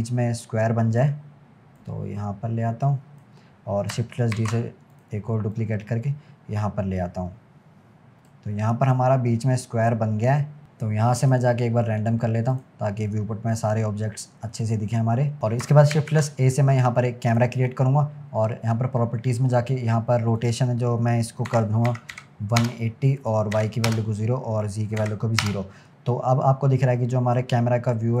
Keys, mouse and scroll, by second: 1.8 click, 4.8 shift+d, 5.6 click, 8.8 click, 10.3-10.6 middle drag, 10.6-11.3 scroll up 1, 11.3-13.4 drag, 13.4-14.5 scroll down 1, 14.5-15.4 middle drag, 15.9 shift+a, 20.4-25.9 drag, 25.9-28.2 middle drag.